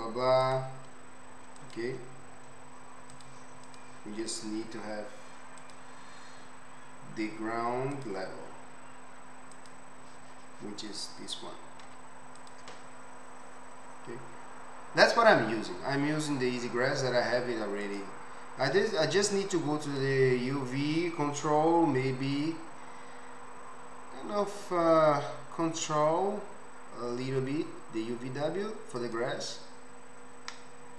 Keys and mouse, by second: 0.4-1.7 drag, 0.4-1.7 right drag, 2.1-3.2 drag, 3.9-5.6 drag, 11.9 z, 13.9-18.0 middle drag, 17.3 click, 17.3-29.6 right drag, 19.9 click, 19.9 middle click, 22.4 s, 29.6-30.1 middle drag, 30.1-30.6 right drag, 30.6 middle click, 30.7 right click, 30.9 middle click.